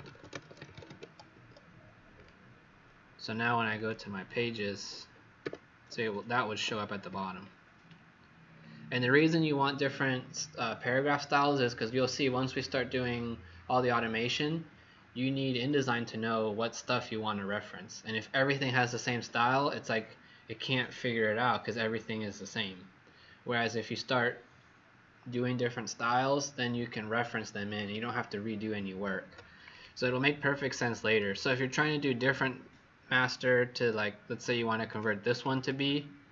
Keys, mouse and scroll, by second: 0.0-1.3 typing, 1.3 Escape, 2.1 click, 5.3 w, 5.9 click, 7.3-8.4 alt+scroll down 1, 29.6 click, 31.3 click, 34.8 click, 35.2 click, 35.4 click.